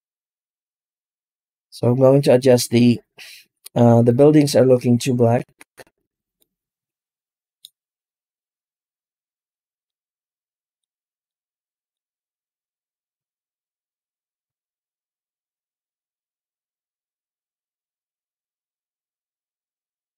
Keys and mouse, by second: 3.2 z, 6.4-7.5 middle drag, 9.8 middle click, 11.2 middle click, 12.5-14.1 drag, 19.2-19.5 middle drag.